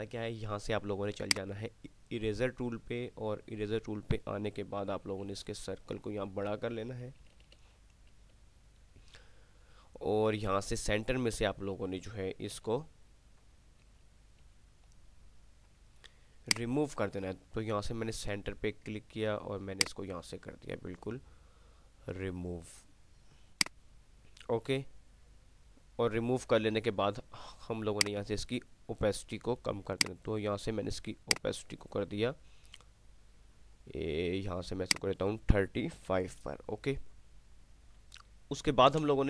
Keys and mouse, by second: 1.3 click, 5.3-8.3 typing, 12.8 [, 14.6 [, 16.6 click, 20.9 click, 23.8 click, 28.3-28.9 drag, 35.1-35.8 click.